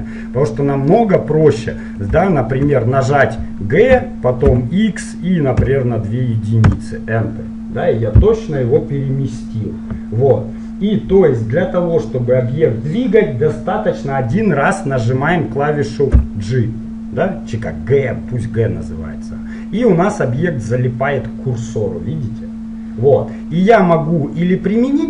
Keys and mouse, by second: 4.0 g, 16.2 g.